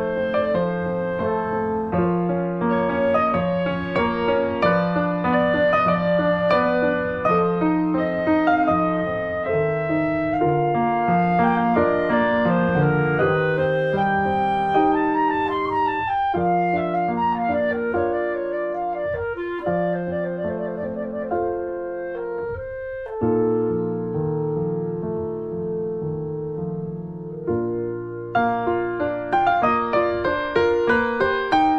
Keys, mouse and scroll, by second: 1.3 click, 1.7-3.7 drag, 4.0 alt+middle click, 4.2 click, 4.4 right click, 5.0 click, 5.3 alt+middle click, 6.1 click, 6.6 click, 7.1 click, 7.5 click, 7.8 alt+middle click, 8.3 s, 9.9 middle click, 10.0 Tab, 10.2 click, 10.8 3, 10.9 click, 11.2 alt+middle click, 11.9 s, 13.6 alt+middle click, 14.5 g, 16.3 shift+middle click, 16.9 ctrl+r, 21.3 middle click, 21.5 Tab, 21.6 Tab, 21.8 click, 22.4 3, 22.5 click, 22.8 middle click, 23.4 ctrl+b, 25.4 middle click, 25.7 click, 25.9 middle click, 26.4 ctrl+b, 27.4 Tab, 27.5 click, 27.7 middle click, 28.0 ctrl+d, 28.3 click, 28.8 right click, 28.9 alt+middle click, 29.4 ctrl+s, 29.6 scroll up 2, 29.8 click, 30.2 g, 31.5 middle click, 31.7 Tab.